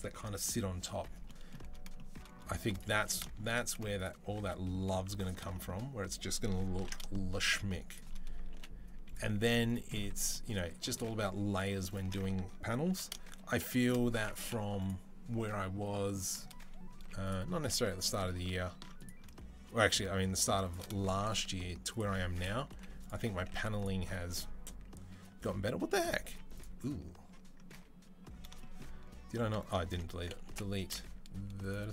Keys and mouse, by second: 2.8 Tab, 3.5 z, 4.0 a, 5.0 alt+click, 6.6 ctrl+b, 7.9-12.0 middle drag, 8.3 Delete, 9.2 z, 9.9 Tab, 10.4 Tab, 10.8 z, 12.0 ctrl+click, 12.7 ctrl+b, 12.8 middle click, 13.0 shift+click, 13.7-18.2 middle drag, 14.2 Delete, 16.8 z, 17.5 a, 18.2 ctrl+click, 18.5 ctrl+r, 18.6 middle click, 19.2-20.6 shift+drag, 20.6-25.6 middle drag, 22.5 Delete, 23.2 z, 26.1 z, 27.5 a, 29.4 alt+click, 30.2 Delete.